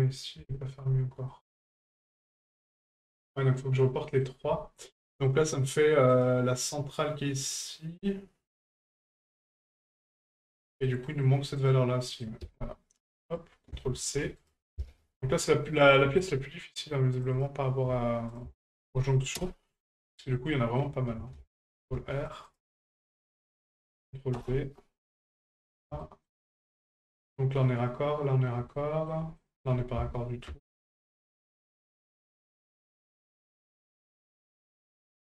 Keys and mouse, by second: 0.5 shift+middle drag, 1.3-4.2 middle drag, 6.1 right click, 8.5-9.3 middle drag, 10.2-10.5 shift+middle drag, 10.8 middle click, 11.6 right click, 12.0 middle click, 13.4-14.6 drag, 18.3-19.4 ctrl+drag, 20.4 ctrl+middle click, 23.4-24.4 drag, 25.5 middle click, 26.0 shift+middle click, 27.1 shift+middle click, 28.8 middle click, 29.4 shift+middle click, 32.2-33.3 drag.